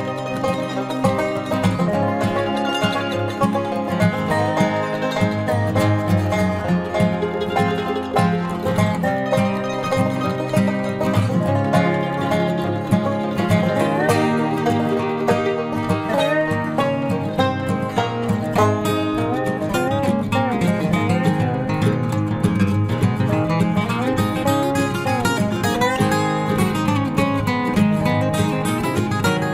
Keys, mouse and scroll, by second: 0.6 c, 2.1 c, 4.4 c, 5.0 click, 5.4-7.1 middle drag, 7.1 right click, 9.1 c, 10.4 right click, 10.6-13.6 middle drag, 12.1 c, 13.9-15.0 right drag, 14.4 KP_Decimal, 15.0 middle click, 15.6 z, 17.1-18.1 drag, 17.6 z, 18.3 ctrl+z, 20.4 i, 21.6-23.5 drag, 25.0 KP_3, 25.3 Tab, 26.2 ctrl+s, 26.7 z, 28.8 Tab.